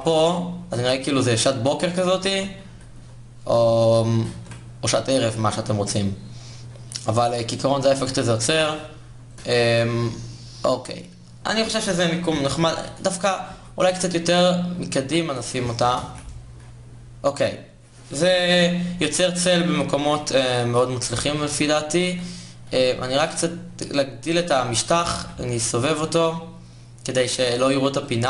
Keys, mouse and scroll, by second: 1.9 shift+z, 2.4 g, 4.0 shift+z, 7.6 shift+z, 8.1 g, 9.3 shift+z, 12.4 KP_7, 13.2 g, 14.7 g, 15.5 KP_0, 15.7 shift+z, 21.7 shift+z, 22.5 s, 24.5 r, 27.1 r.